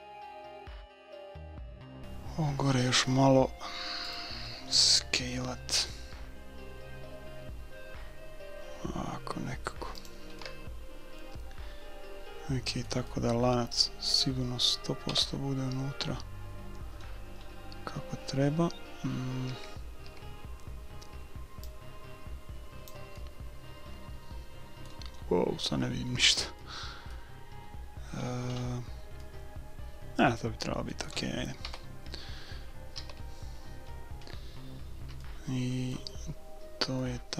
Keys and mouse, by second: 1.2-3.1 middle drag, 4.1-6.0 drag, 6.1 s, 10.5-12.5 middle drag, 13.2-15.0 middle drag, 15.1 KP_7, 17.0-19.3 middle drag, 19.5 a, 20.0 a, 21.7-23.3 drag, 23.3 middle click, 23.4 click, 23.5-25.1 middle drag, 25.2-26.7 middle drag, 27.7 middle click, 29.2-30.9 middle drag, 31.2-32.7 middle drag, 31.6 KP_1, 33.0 a, 33.3-37.3 middle drag.